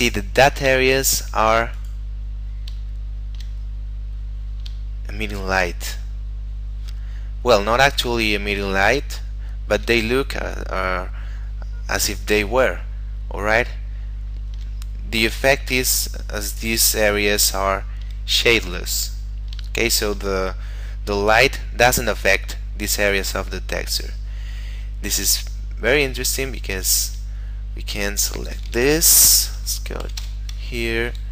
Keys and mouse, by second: 1.0 shift+middle click, 1.9 right click, 2.4 KP_Decimal, 3.1 shift+middle click, 4.4 middle click, 5.1 shift+middle click, 12.7 shift+middle click, 15.6 shift+middle click, 16.0 middle click, 17.8 shift+middle click, 19.8 shift+middle click, 26.8 right click, 28.5 click, 29.5 1, 30.1 5, 30.3 Return.